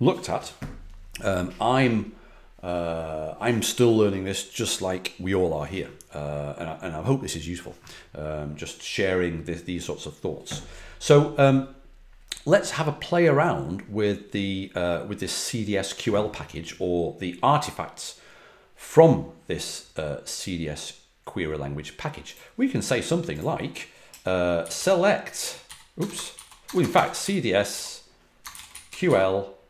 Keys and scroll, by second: 24.3-29.6 typing.